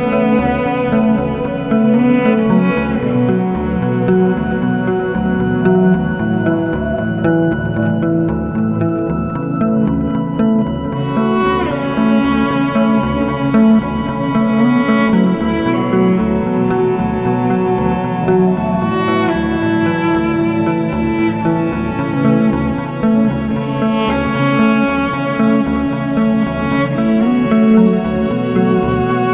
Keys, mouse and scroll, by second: 4.4 KP_Decimal, 4.6 scroll down 5, 4.8-5.7 middle drag, 5.7 g, 22.6-29.3 drag.